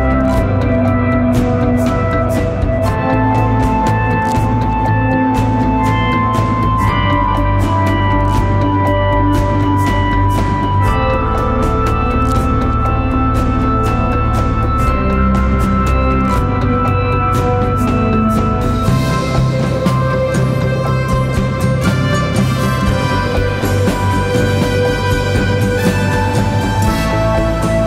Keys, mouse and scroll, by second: 9.1-10.1 scroll down 1, 10.1 click, 19.3-21.2 drag, 21.6-22.1 scroll down 1, 22.1-23.1 typing, 22.5 click, 22.9 click, 23.3 click.